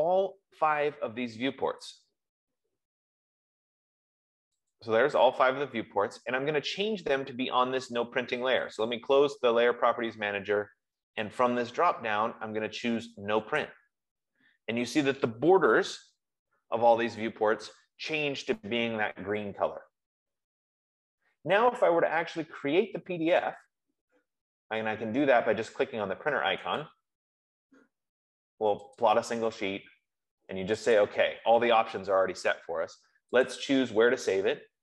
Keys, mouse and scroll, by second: 2.3 click, 5.1 click, 9.4 click, 11.8 click, 14.0 click, 16.2 Escape, 27.2 F15, 27.2 click, 29.3 click, 31.2 click, 33.7 click.